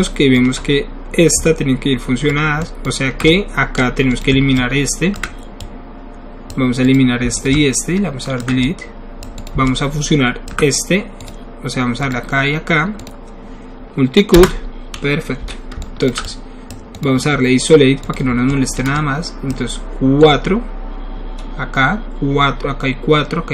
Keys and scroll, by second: 14.4 Return, 15.4 w.